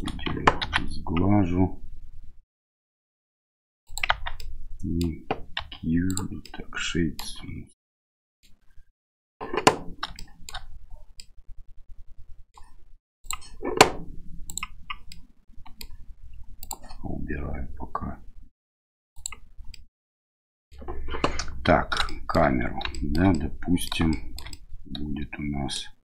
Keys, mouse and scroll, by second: 0.6 ctrl+b, 4.1 Tab, 4.3-5.0 middle drag, 5.5 q, 6.4-7.2 middle drag, 7.9-8.4 middle drag, 10.1-10.5 shift+middle drag, 11.1-12.5 middle drag, 13.3-14.9 drag, 15.1-15.8 middle drag, 16.6-19.6 drag, 19.7-20.7 middle drag, 22.0 shift+middle drag, 22.9 shift+middle drag, 23.3 middle click, 24.1-24.4 shift+middle drag, 24.5-25.7 middle drag.